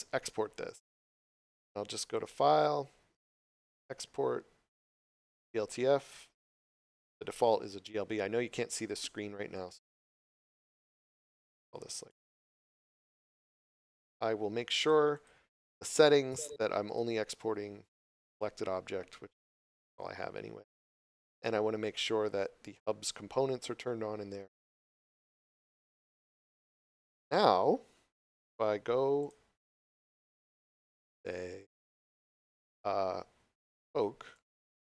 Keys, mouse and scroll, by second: 1.5 click, 6.8 click, 10.8 click, 14.8 click, 21.8 click, 26.2 click, 29.2 click, 31.6 click, 34.3 right click, 34.6 click.